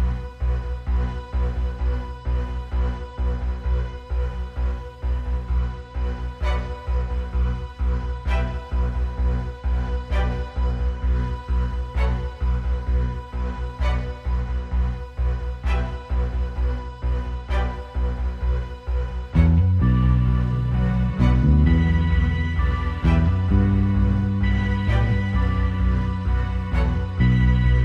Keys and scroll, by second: 3.2 super+[, 4.6 super+], 4.9 super+[, 5.2 super+], 9.8 super+], 10.8 space, 15.0 space, 15.6 super+space, 16.0 super+space, 16.6 space, 22.9 ↺.